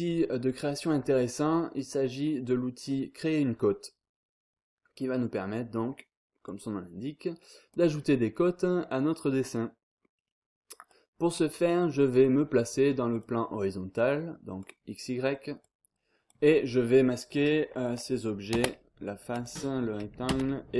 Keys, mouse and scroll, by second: 5.3-5.7 scroll down 2, 5.7-6.4 scroll up 2, 6.4-7.9 drag, 7.9 scroll down 2, 8.2-8.8 scroll up 1, 9.5-10.0 scroll up 2, 10.0 scroll down 2, 10.3-10.9 scroll up 2, 10.9-12.7 drag, 13.1 click, 14.6 click, 15.3-15.6 scroll up 2, 15.6 click, 16.5 scroll down 2, 16.7-17.2 scroll up 2, 17.8 click, 18.5 space, 19.3 click, 20.3 space.